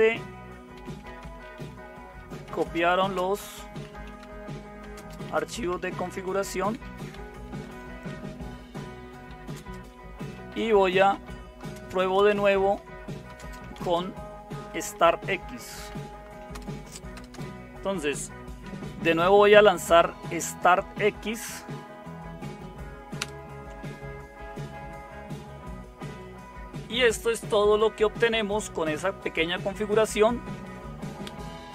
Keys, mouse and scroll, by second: 0.0-8.1 typing, 9.3-17.8 typing, 19.3-21.9 typing, 22.9-23.7 typing.